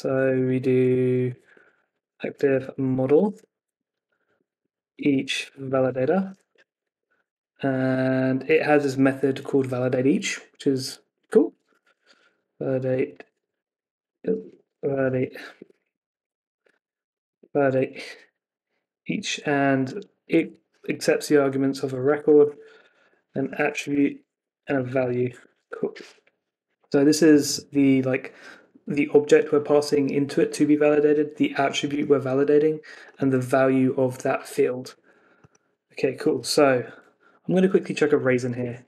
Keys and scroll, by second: 6.4 Escape, 15.5 Escape, 15.7 Left, 17.3 Return, 25.3 Escape, 36.3 Escape.